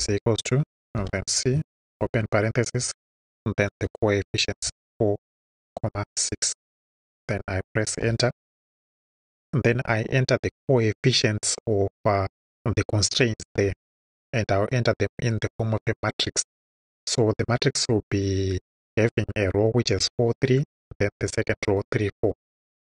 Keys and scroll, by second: 1.5 shift+c, 1.9 shift+9, 3.7 4, 4.6 ,, 5.4 6, 8.0 Return.